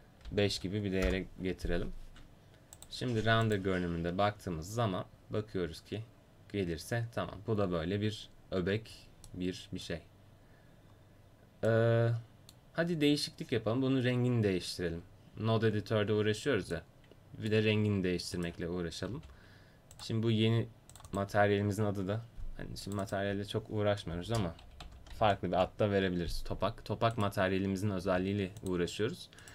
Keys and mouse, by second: 4.0 click, 9.3 middle click, 9.6 middle click, 12.0 middle click, 18.4 right click, 19.1 g, 22.9-29.5 right drag, 28.1 g.